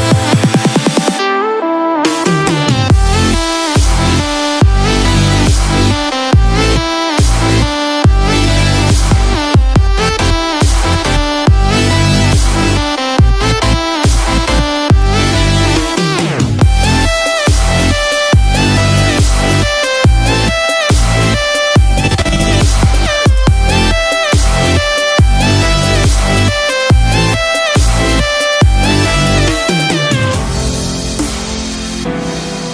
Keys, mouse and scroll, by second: 3.5 space, 4.8 click, 7.3-7.7 scroll down 1, 8.5-8.8 scroll down 2, 8.9 scroll up 1, 9.6 shift+middle click, 9.6-10.9 scroll up 1, 11.2 middle click, 12.6 shift+middle click, 14.5 click, 17.4 shift+middle click, 20.2 middle click, 23.7 shift+middle click, 24.9 middle click, 26.2 shift+middle click, 27.5 middle click, 28.5 shift+middle click, 29.1 middle click.